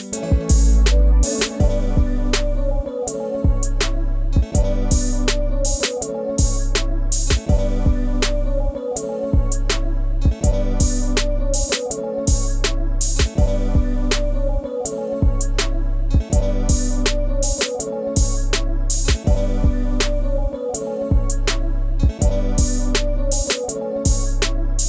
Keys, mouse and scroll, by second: 0.2-1.5 scroll down 1, 5.3 scroll, 5.5 scroll down 1, 5.5 ctrl+space, 5.6 ctrl+click, 5.8 ctrl+space, 6.9 shift+click, 7.4 shift+click, 9.7 shift+click, 10.3 shift+click, 13.0 scroll, 13.2 scroll up 1, 13.2 super+s, 13.3 super+click, 13.6 super+space, 14.1 scroll up 1, 19.4 scroll, 19.9 ctrl+space, 20.0 ctrl+click, 20.2 ctrl+space, 20.8-21.1 ctrl+scroll up 1, 21.5 ctrl+space, 21.6 ctrl+click, 21.9 ctrl+space, 22.1 scroll down 1, 24.2 shift+click.